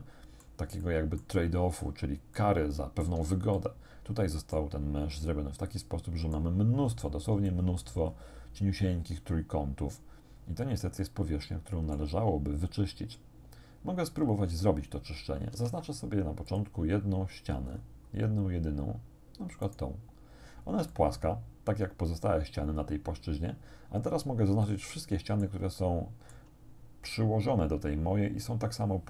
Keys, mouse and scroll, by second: 0.7 middle click, 0.9 click, 2.4 shift+click, 3.6-4.8 drag, 5.1-6.6 drag, 6.8-7.1 scroll up 2, 7.5 shift+click, 8.2 shift+scroll up 2, 8.4-10.0 shift+middle drag, 10.0-10.7 scroll down 2, 11.0-12.2 shift+middle drag, 12.3 shift+scroll down 1, 15.5 ctrl+Tab, 16.5 click, 17.7-18.3 scroll up 2, 19.7 right click, 20.5 scroll down 2, 20.9-24.5 drag, 24.7-25.7 drag, 25.8 shift+click.